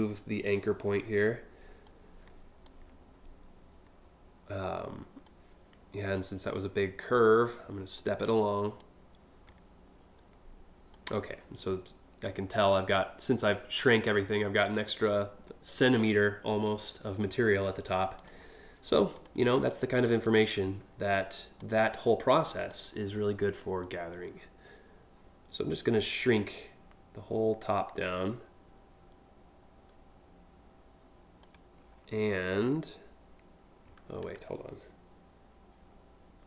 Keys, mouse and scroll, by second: 2.2-4.9 drag, 6.1-7.6 drag, 8.4-10.5 drag, 17.8 click, 18.8 click, 19.4 click, 19.8 ctrl+click, 21.2 click, 22.3-23.4 drag, 25.7-31.0 shift+drag.